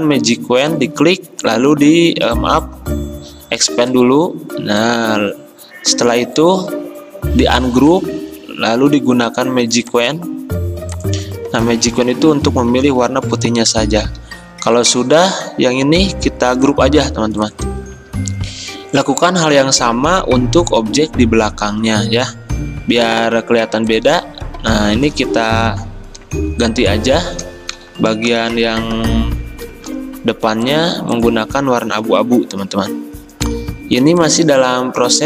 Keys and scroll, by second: 2.8 v, 12.1 Delete, 13.5 v, 14.1 ctrl+a, 18.1 Escape, 22.6 d, 25.2 ctrl+z, 26.3 ctrl+z, 34.1 x.